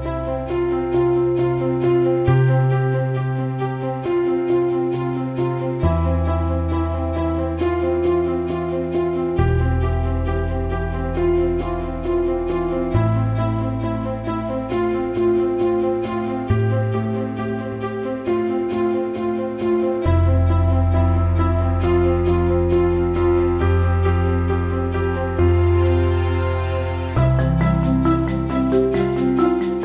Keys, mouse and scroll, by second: 2.4-4.5 drag, 4.9 alt+middle click, 7.4 drag, 8.2 alt+middle click, 9.9 click, 10.9 alt+middle click, 11.9-14.2 ctrl+drag, 14.5 alt+middle click, 14.8 alt+shift+middle click, 15.8 alt+middle click, 16.9 alt+middle click, 17.6 click, 17.9 alt+shift+middle click, 18.7 alt+shift+middle click, 19.7-20.9 drag, 21.6 click, 24.5 click, 25.8 click, 27.9 alt+shift+middle click, 29.2 click.